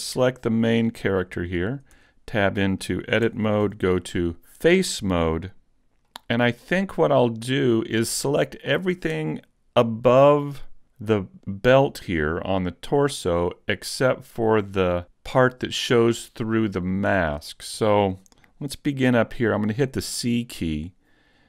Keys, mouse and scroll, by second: 0.3 shift+middle click, 1.7-2.3 scroll up 2, 1.9 Tab, 2.5 middle click, 3.3 ctrl+Tab, 6.1 middle click, 10.4-11.7 scroll down 1, 11.7 scroll down 1, 13.2-16.4 scroll down 1, 16.4 scroll up 1, 17.7-18.3 scroll up 1, 18.3 shift+middle click, 18.3 scroll up 1, 18.8-19.1 scroll up 1, 19.1 shift+middle click.